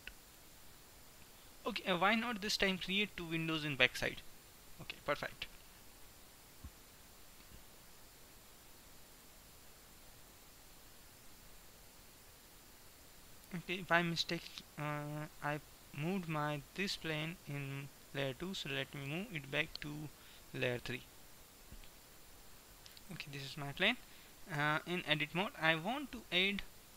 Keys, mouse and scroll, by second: 6.0-7.8 drag, 7.8-9.1 middle drag, 9.1-13.0 drag, 13.5-17.0 middle drag, 19.1 m, 22.6-24.6 drag, 24.6 Tab, 25.1 middle click, 25.8-26.9 middle drag.